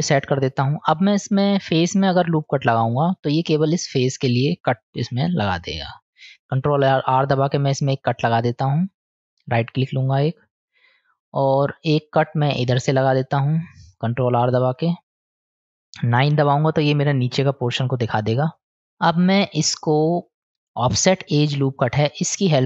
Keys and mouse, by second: 1.0 middle click, 6.4 ctrl+r, 14.5 ctrl+r, 16.2 KP_9, 18.6 click, 20.4 click.